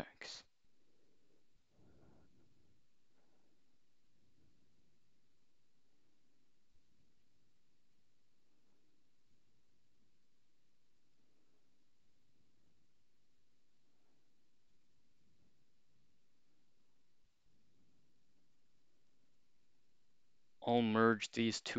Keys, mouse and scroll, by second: 20.8 shift+click.